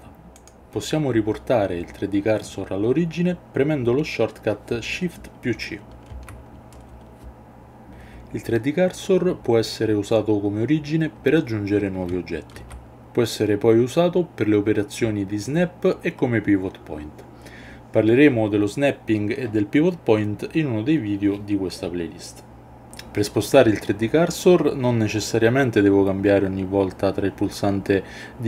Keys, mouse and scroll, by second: 6.1 shift+c, 12.5 shift+a.